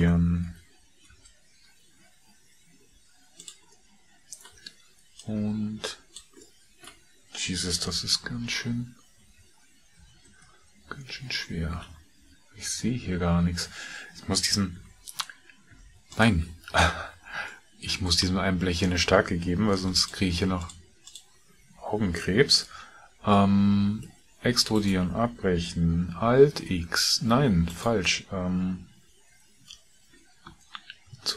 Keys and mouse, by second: 8.2 KP_3, 9.9 KP_5, 10.3 KP_1, 14.8 Tab, 15.7 Tab, 16.2 click, 17.0 Tab, 17.5 middle click, 19.7 3, 19.9 click, 20.6 shift+click, 21.1 shift+click, 26.0 alt+e, 26.6 alt+x, 31.0 ctrl+z.